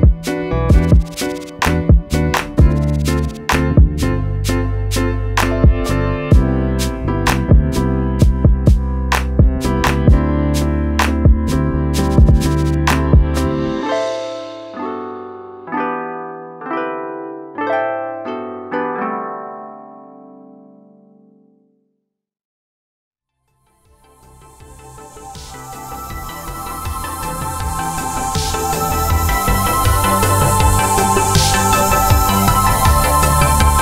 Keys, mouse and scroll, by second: 0.5 click, 1.3 alt+scroll down 2, 1.7 click, 2.9 scroll down 1, 3.1 click, 3.4 scroll up 1, 3.8 click, 4.1 shift+click, 4.4-5.0 alt+scroll down 2, 5.0 click, 5.6 z, 6.6 click, 7.7 right click, 7.9 click, 8.1-8.5 alt+scroll up 2, 8.5 click, 8.8 right click, 9.4 click, 9.6 right click, 10.2 click, 10.7-11.7 alt+scroll down 2, 11.8 ctrl+z, 12.1 click, 13.7 click, 14.1 click, 16.3 click, 17.1 click, 18.3 scroll down 1, 19.0 scroll down 1, 19.2 scroll up 1, 19.4-20.0 scroll down 1, 20.0 click, 21.8 click, 23.4 click, 29.1 click, 33.6 click.